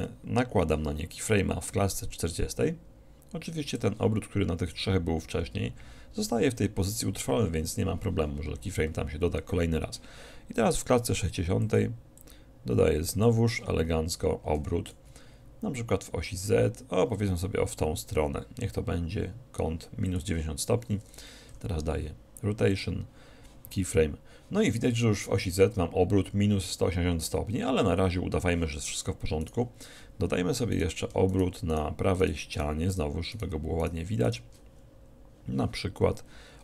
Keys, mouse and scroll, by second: 2.1 i, 11.7-13.9 drag, 14.6 r, 21.0-22.0 drag, 21.6 |, 29.5-36.0 right drag.